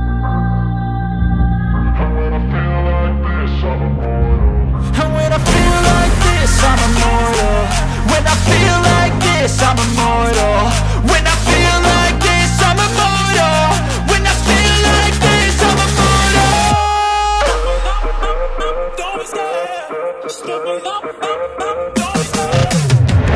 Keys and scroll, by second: 8.6 space, 15.2 space, 15.9 e, 16.3 Escape.